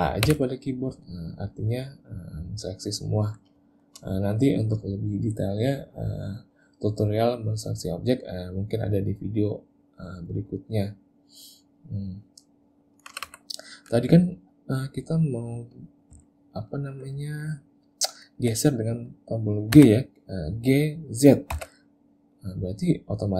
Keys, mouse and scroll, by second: 0.3 a, 1.8 middle click, 3.7 shift+middle click, 11.5 middle click, 13.2 a, 13.3 a, 13.9 click, 16.3 ctrl+middle click, 17.5 ctrl+middle click, 19.8 g.